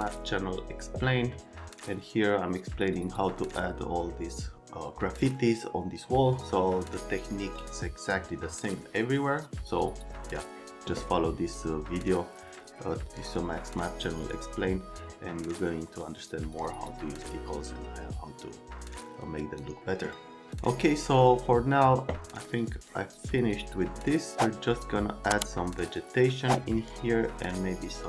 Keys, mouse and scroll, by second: 20.5 click, 21.1 click, 21.7 click, 22.6 click, 24.3 middle click.